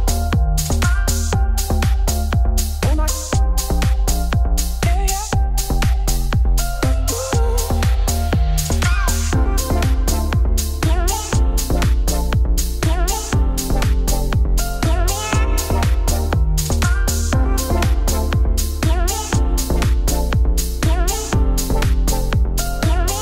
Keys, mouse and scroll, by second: 0.8 Tab, 0.8 click, 1.1 Tab, 1.2 3, 1.3 click, 1.9 shift+d, 2.4 p, 2.7 Tab, 2.9 click, 3.2 shift+click, 3.9-5.0 shift+drag, 5.0 Tab, 5.2 z, 5.9 a, 6.5 e, 8.5 3, 8.7 click, 9.2 middle click, 9.4 scroll up 2, 11.8 a, 12.1 middle click, 12.4 click, 13.0 middle click, 13.1 s, 14.9 scroll down 2, 15.1 middle click, 15.6 Tab, 17.0 middle click, 17.4 shift+right click, 17.5 shift+a, 18.3 middle click, 18.5 Tab, 18.5 s, 19.7 Tab, 19.8 g, 21.8 Tab, 22.0 middle click, 22.6 s, 23.0 middle click.